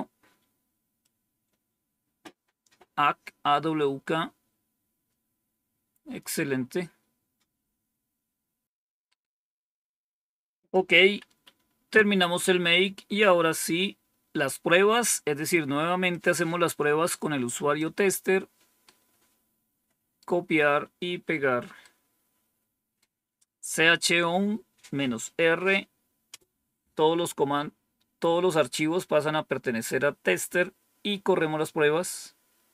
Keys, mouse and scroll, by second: 0.9-2.2 drag, 5.4-6.3 scroll down 1, 7.2-7.8 scroll down 1, 7.8-8.6 scroll down 1, 10.5 click, 11.2 Home, 11.8 Down, 13.2-14.0 scroll down 1, 16.0-17.7 drag, 18.8-20.1 right drag, 21.7-23.0 right drag, 26.2 Return.